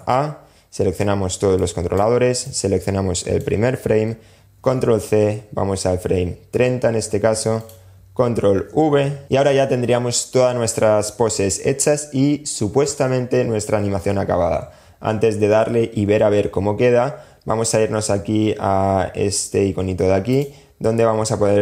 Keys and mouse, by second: 0.8 click, 2.5 click, 3.7 super+c, 6.8 click, 7.7 super+v, 19.6-21.6 drag.